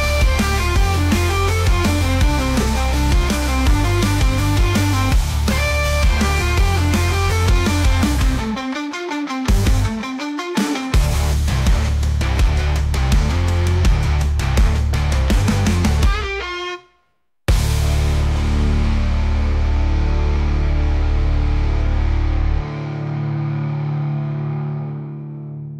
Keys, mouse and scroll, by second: 2.4 click, 2.9 click, 3.3 alt+h, 3.9 click, 4.8 Delete, 5.7 click, 6.7-8.0 middle drag, 8.0 `, 8.7 `, 10.2 shift+d, 12.8 alt+r, 13.6-14.3 middle drag, 14.3 r, 16.8 `, 17.6 g, 19.1 scroll up 1, 19.4 shift+middle click, 19.7-20.7 scroll up 3, 20.0 shift+middle click, 20.7 g.